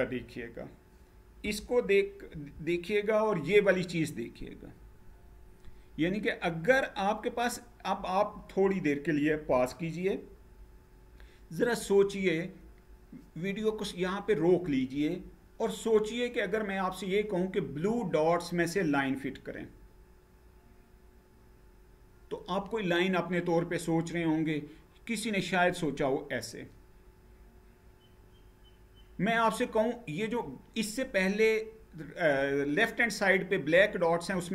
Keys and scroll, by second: 2.0 Up.